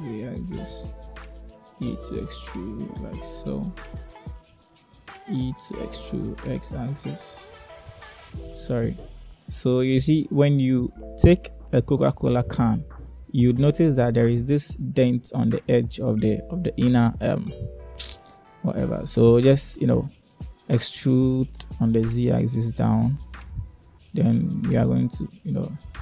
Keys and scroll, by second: 1.3 e, 5.7 e, 20.2 e, 21.6 z, 24.1 e, 25.9 x.